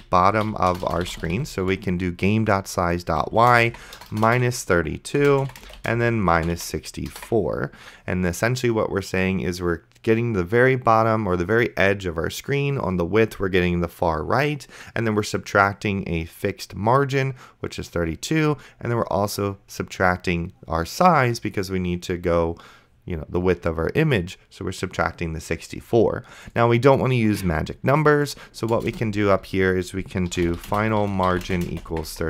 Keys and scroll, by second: 0.0-2.2 typing, 3.2-7.2 typing, 29.1 Return, 30.1-32.2 typing.